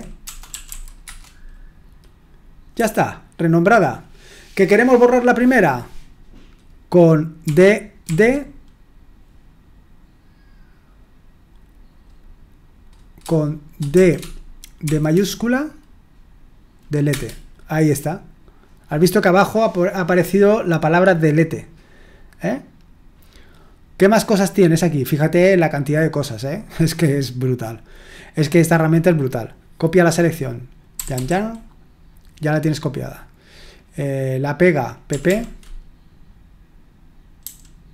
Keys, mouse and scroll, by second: 0.0-1.2 typing, 2.8 typing, 7.4-8.0 typing, 13.9-14.8 typing, 17.1 Return, 30.9 typing, 35.1 typing, 37.4 typing.